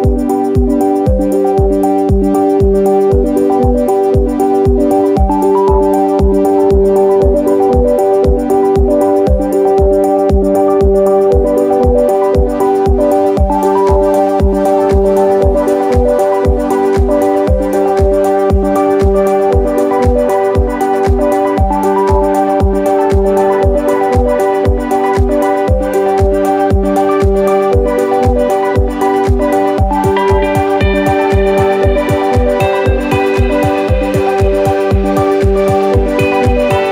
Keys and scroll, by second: 1.0 p, 5.4 b, 16.5 ctrl+z, 18.1 m, 20.4 typing, 22.6 Escape, 36.5 Escape.